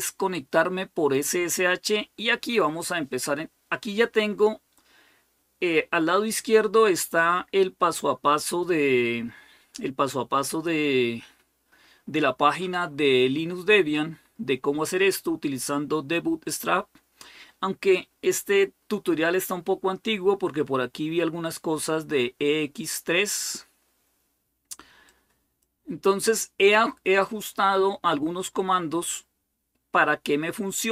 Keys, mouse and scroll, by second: 1.4-2.0 scroll down 2, 4.8-6.1 scroll down 1, 6.1-7.3 scroll down 1, 7.3-9.4 scroll up 2, 9.4-10.0 scroll down 2, 10.0-12.4 scroll up 3, 13.8-15.4 scroll down 1, 16.8-17.4 scroll down 2, 19.6-20.3 scroll down 2, 21.1-21.7 scroll down 2, 22.6-24.3 scroll up 2, 24.8-26.1 drag, 29.3-30.9 scroll down 4.